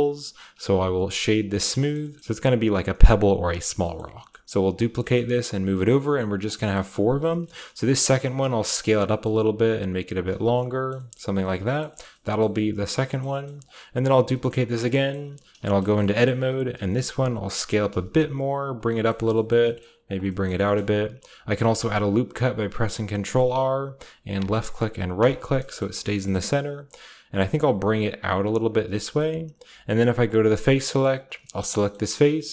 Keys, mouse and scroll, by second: 0.4-1.4 scroll down 1, 0.4 w, 1.4-2.5 shift+drag, 2.1-2.5 typing, 3.4-4.5 shift+middle drag, 4.5-5.1 shift+scroll down 1, 4.7-5.4 typing, 6.2-7.9 drag, 6.8 Tab, 7.4-9.1 shift+scroll up 1, 7.5-8.9 typing, 8.7-10.1 shift+drag, 10.2-11.7 drag, 10.3 Tab, 10.3-11.7 scroll down 1, 11.1 Tab, 11.4 Tab, 11.4-12.9 typing, 12.1-17.5 shift+scroll up 2, 13.6-14.7 middle drag, 14.1 shift+d, 14.7-15.5 shift+drag, 15.5-16.5 typing, 15.7 Tab, 17.6-18.4 typing, 19.6-21.1 typing, 20.0 shift+middle click, 20.2-22.9 shift+scroll up 1, 20.6 shift+click, 21.5 ctrl+r, 24.3-25.9 drag, 25.1-26.2 right drag, 25.5-27.5 middle drag, 25.7-26.8 scroll up 2, 26.8 shift+scroll down 2, 27.3 g, 28.3-31.2 drag, 32.0 click.